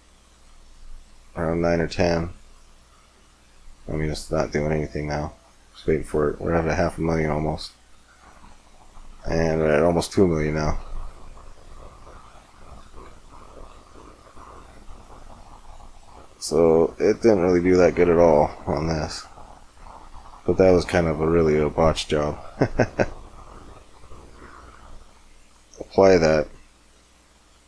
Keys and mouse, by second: 8.0-11.6 middle drag, 14.5 middle click, 14.7 middle click, 14.8 click, 14.9 middle click, 15.6 middle click, 15.9 middle click, 16.6 middle click, 17.4-19.0 middle drag, 20.7 middle click, 22.3 middle click, 24.0 middle click, 24.8-27.6 drag.